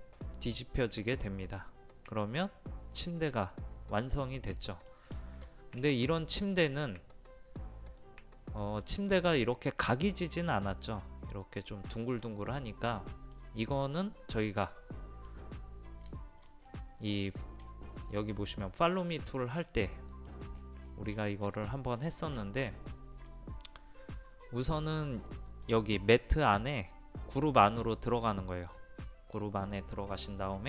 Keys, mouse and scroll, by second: 7.6-8.0 scroll up 1, 8.0-17.3 middle drag, 17.4 shift+middle click, 17.8 scroll down 1, 19.9 middle click, 20.6 scroll up 1, 21.2 shift+middle click, 22.4-24.1 shift+middle drag, 25.2 click, 30.1 middle click.